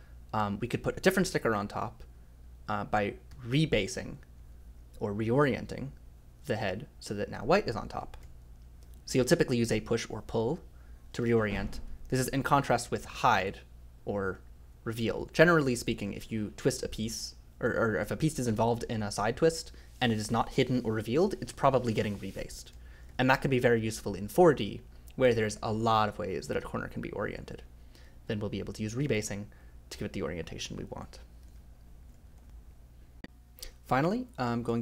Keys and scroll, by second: 3.3 k, 7.7 j, 8.2 i, 11.1 ctrl+z, 11.3 ctrl+z, 11.5 ctrl+z, 11.8-14.6 typing, 19.7 k, 22.5-23.8 typing, 28.7-29.7 typing.